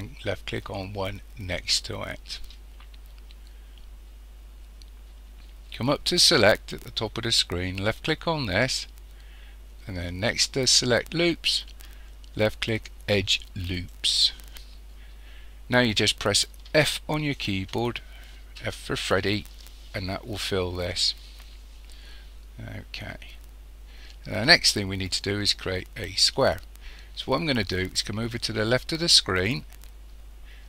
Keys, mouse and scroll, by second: 1.6 shift+click, 8.0-30.6 drag, 16.7 f.